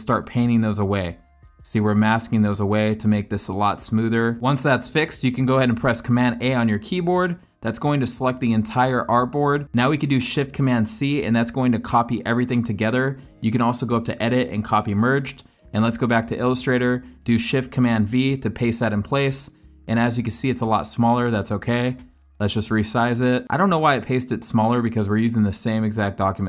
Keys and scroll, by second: 6.4 super+a, 11.0 shift+super+c, 18.1 shift+super+v.